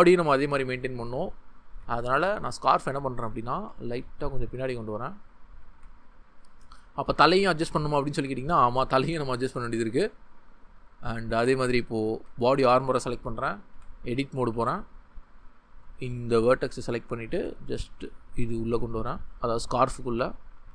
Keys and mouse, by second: 0.9 Tab, 3.5 g, 4.5 click, 5.7 g, 6.6 shift+middle click, 7.2 shift+middle click, 8.0 Tab, 9.5-10.1 drag, 12.0 shift+middle click, 12.6 shift+middle drag, 13.7 Tab, 14.5 Tab, 16.9 ctrl+middle click, 17.3 g, 19.2 click, 19.8 g, 20.6 g.